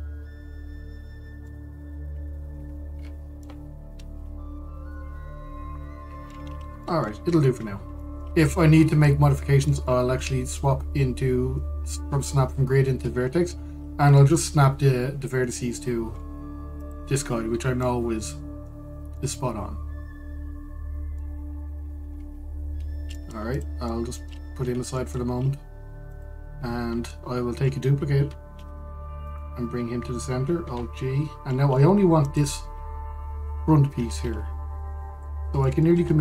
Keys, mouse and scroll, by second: 2.5-3.2 scroll up 2, 3.2 scroll down 2, 3.3-3.6 scroll, 4.1-8.0 middle drag, 8.0-8.7 scroll up 2, 8.7-9.3 shift+middle drag, 9.3-9.7 scroll down 2, 9.7-13.6 middle drag, 13.6-14.8 scroll up 2, 14.8-16.8 shift+middle drag, 16.8-17.5 scroll up 2, 17.5 click, 18.0-18.5 scroll down 1, 18.5-22.8 middle drag, 22.8-23.8 scroll down 1, 23.8-24.2 middle drag, 24.2 click, 24.6-25.3 middle drag, 25.3 g, 27.1-27.8 scroll down 1, 27.8-29.2 shift+middle drag, 29.2 shift+d, 31.3 alt+g, 32.2-32.9 middle drag, 32.9 click, 33.7-34.2 scroll up 1, 34.2-34.7 shift+middle drag, 34.7 scroll up 1.